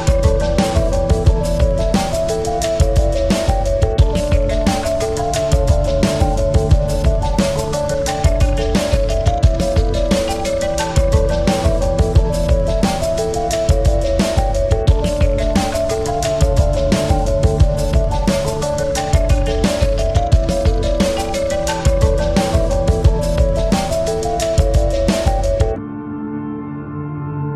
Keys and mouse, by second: 1.5 space, 2.2 click, 3.0 alt+click, 3.7-4.2 typing, 3.9 click, 4.9-6.7 drag, 8.8 click, 8.8 typing, 10.0 shift+click, 11.6 click, 11.6 typing, 14.9 click, 15.4 typing, 16.1 ctrl+c, 16.7 ctrl+f, 17.6 ctrl+f, 17.6 typing, 17.8 ctrl+=, 18.9 ctrl+=, 18.9 typing, 20.4-22.2 shift+drag, 23.5 shift+click, 24.6 ctrl+g, 25.3 typing, 25.5 ctrl+g, 27.3 typing, 27.4 click.